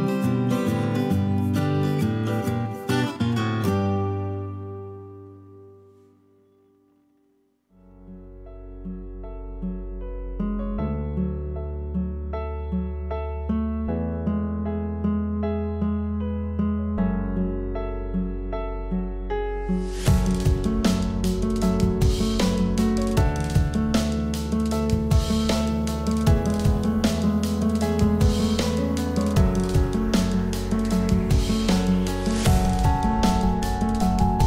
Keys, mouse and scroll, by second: 3.1 m, 7.9 m, 16.8 F2.